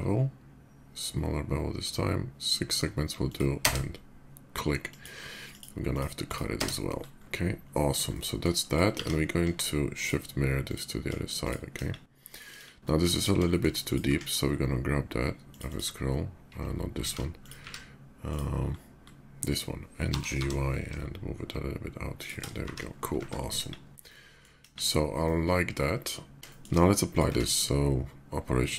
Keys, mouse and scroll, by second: 1.3 b, 2.0-3.0 middle drag, 3.0 click, 3.4 space, 4.6 click, 5.3 click, 5.7 click, 6.0 click, 6.7 middle click, 7.8-8.2 middle drag, 8.3 click, 8.7 alt+x, 9.4 alt+shift+x, 9.7 click, 10.4 click, 11.2 shift+click, 11.5 KP_5, 12.0 right click, 12.8 middle drag, 13.2 shift+middle click, 13.5 shift+click, 14.8 q, 15.1 click, 15.4 click, 16.7 ctrl+z, 17.1 click, 17.4 q, 17.9 click, 19.2 click, 19.8 g, 20.2 y, 21.9 shift+click, 22.4 shift+2, 23.0 shift+2, 23.5 KP_5, 23.8-24.2 middle drag, 25.0-26.3 middle drag, 26.7 click, 27.0 q.